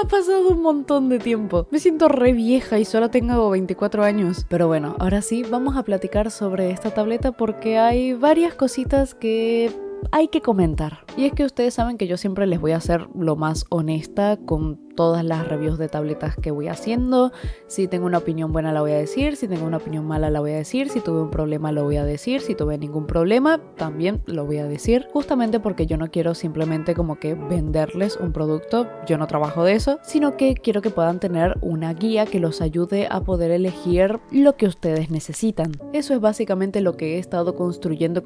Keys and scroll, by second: 2.4 ], 4.4 space, 5.0 space, 5.3 space, 5.7 space, 17.1 i, 23.7 space, 23.8 space, 24.0 space, 25.4-28.1 typing, 29.5 i, 29.8 space, 31.1 i, 32.3 i, 33.5 i, 33.6 i, 34.3 i, 35.3 space, 35.7 ctrl+z, 36.0 c.